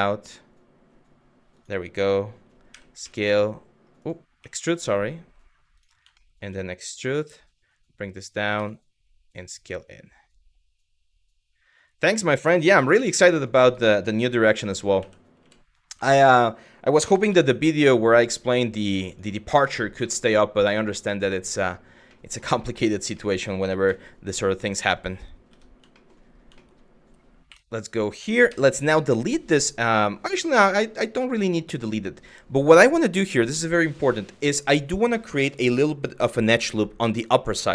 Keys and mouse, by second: 1.2 click, 2.4 e, 2.7 s, 5.4 click, 5.8 middle click, 6.5 e, 7.9 click, 8.2 s, 11.6 click, 12.6 2, 13.1 click, 14.6 w, 15.0 g, 16.7 g, 16.9 z, 18.7 click, 19.7 shift+middle click, 20.8 shift+middle click, 21.8 middle click, 22.4 Tab, 22.8-23.1 middle drag, 23.5 z, 24.5 middle click, 25.1 Tab, 25.6 shift+middle click, 26.3 shift+middle click, 27.1 3, 28.1 x, 30.2 middle click, 31.3 middle click.